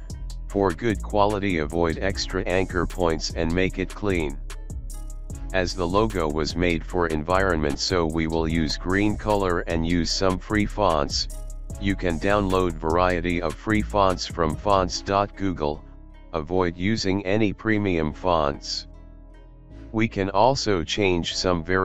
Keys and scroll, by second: 0.6 alt+space, 2.5 ctrl+z, 2.9 alt+space, 4.3 space, 4.4 Delete, 6.3 Delete, 8.1 ctrl+alt+space, 8.9 ctrl+alt+z, 9.8 ctrl+alt+space, 10.5 alt+space, 11.4 alt+space, 11.7 alt+space, 12.0 alt+space, 13.2-15.0 typing, 13.5 ctrl+a, 15.4 ctrl+a, 17.0 shift+Return, 17.0 typing, 17.7 ctrl+a, 18.7 alt+space, 19.0 Up, 19.5 ctrl+t, 21.5 alt+shift+space, 21.7 Down.